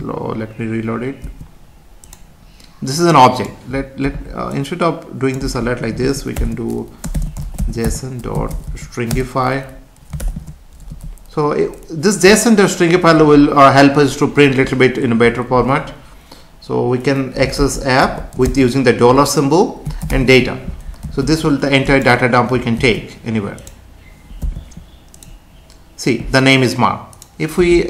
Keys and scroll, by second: 1.2 F5, 9.1 Return, 10.9 Left, 21.0 ctrl+s, 22.8 ctrl+s, 24.4 F5.